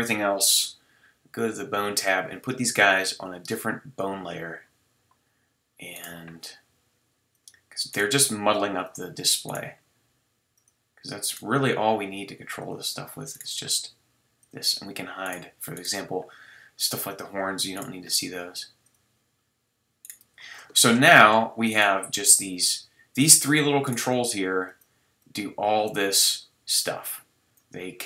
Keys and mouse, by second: 1.8-4.8 drag, 20.7-21.1 middle drag, 21.1 click, 21.1 middle drag, 21.3-21.6 drag, 22.0 g, 22.5-23.1 drag, 24.1 g, 28.0 middle drag.